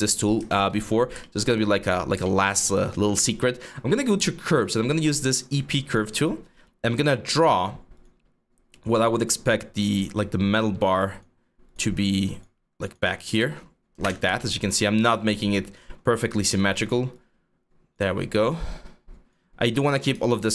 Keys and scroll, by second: 0.5 4, 13.7 Return, 16.1 w, 19.8 r.